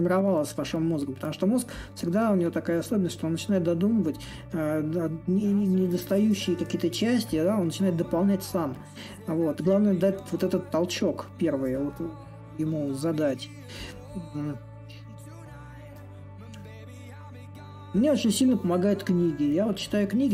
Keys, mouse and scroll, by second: 3.2-8.3 drag, 8.4-13.5 drag, 13.8-20.3 drag.